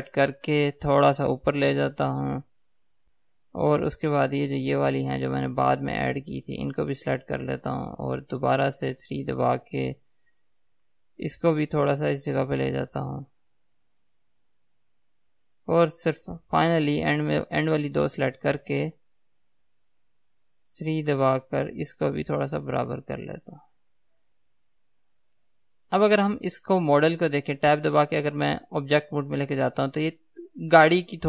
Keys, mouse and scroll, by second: 0.9 g, 3.1 click, 4.0-5.8 middle drag, 5.8 click, 6.6 shift+click, 9.4 KP_3, 11.2 g, 14.4 click, 15.8-18.2 middle drag, 18.2 shift+click, 20.6 KP_3, 22.5 g, 25.9-31.2 middle drag, 28.3 Tab.